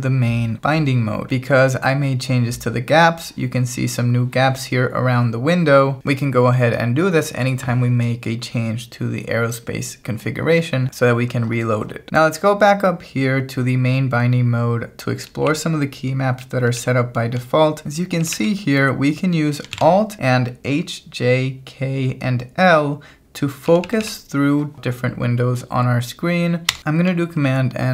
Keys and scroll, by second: 12.1-18.2 typing, 19.7 shift+v, 23.7 j, 27.4 super+n.